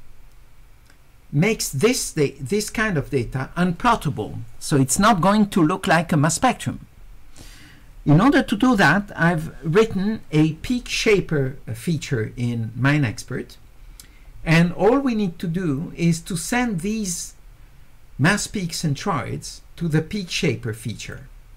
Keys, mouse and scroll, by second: 21.0 click.